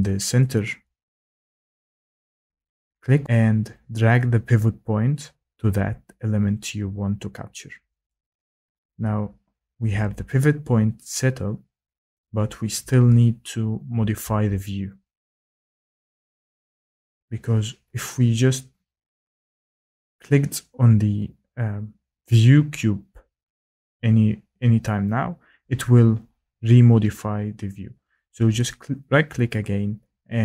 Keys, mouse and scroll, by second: 8.0 click, 28.7 right click.